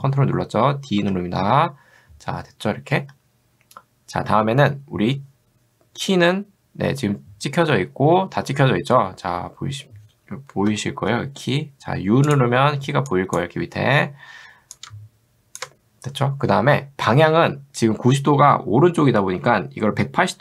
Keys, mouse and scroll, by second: 1.0 ctrl+d, 11.1 u, 12.3 click, 13.1 click, 14.8 click.